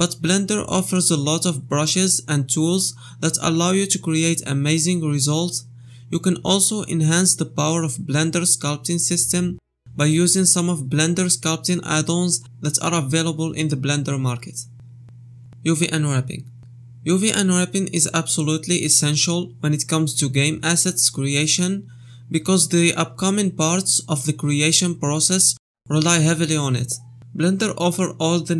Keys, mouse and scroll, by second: 21.1 click, 25.1 KP_Divide, 25.4 middle click, 25.7 Tab, 25.8 shift+middle click, 27.2 a, 28.0 2.